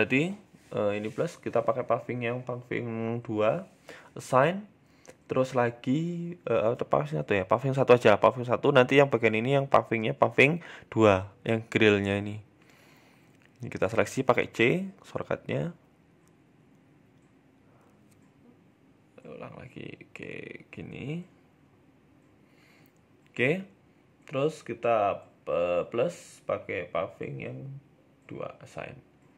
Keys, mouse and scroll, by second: 0.2 click, 2.7 click, 4.6 click, 5.9 Tab, 6.2 Tab, 6.5 scroll up 2, 6.7 shift+middle click, 7.3 a, 7.4 a, 8.6 KP_3, 9.2 KP_1, 9.7-10.7 scroll up 4, 9.9 shift+middle click, 11.1 scroll up 1, 12.4 c, 15.2 middle click, 15.9 shift+middle click, 16.2-16.7 scroll down 2, 16.7 middle click, 17.6 a, 17.7 a, 17.9 middle click, 18.3 c, 20.7 middle click, 21.2 shift+middle click, 21.7 shift+right click, 22.0 middle click, 22.7 middle click, 22.7 shift+middle click, 23.0-23.3 scroll down 2, 23.1 middle click, 23.3 middle click, 25.3 click, 25.7 click, 28.0 click, 28.0-28.3 scroll down 3, 28.1 Tab, 28.3 middle click, 29.2 scroll down 2.